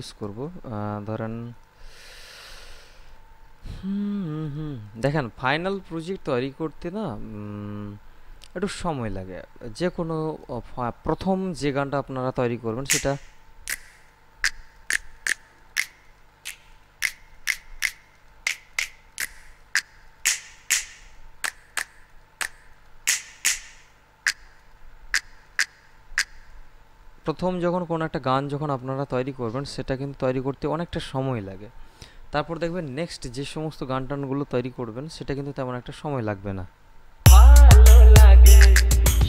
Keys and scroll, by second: 37.4 space.